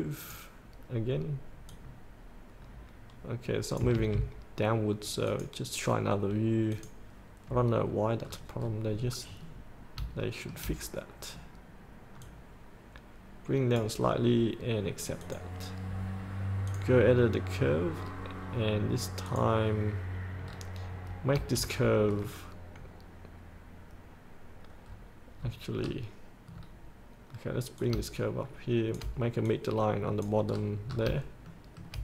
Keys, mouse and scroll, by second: 5.5 click, 8.5-9.2 scroll down 1, 9.7-10.2 scroll down 1, 10.4 shift+middle click, 12.5 click, 12.8-14.3 drag, 14.3-15.4 scroll up 1, 15.4 click, 17.8-18.2 scroll down 1, 19.5 click, 20.7-21.3 scroll down 1, 21.3 scroll up 1, 22.1 scroll down 1, 25.1 scroll up 1, 26.7 scroll down 1, 28.1 click, 29.7 click, 30.7 scroll up 1, 31.7 shift+middle click.